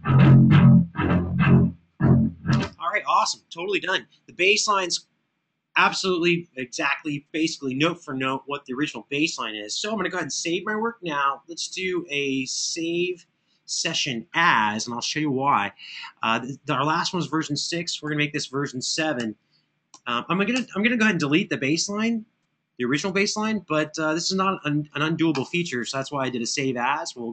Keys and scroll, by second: 2.3 space, 10.1 super+s, 17.8 Tab, 19.0 Delete, 19.7 7, 20.3 Return.